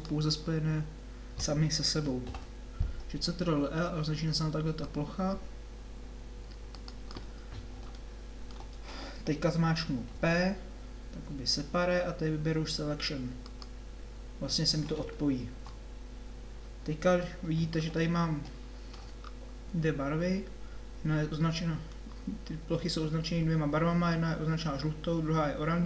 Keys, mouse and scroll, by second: 2.3 ctrl+l, 4.8 click, 10.2 p, 15.6 Tab, 19.3-22.2 middle drag, 23.1-25.3 middle drag.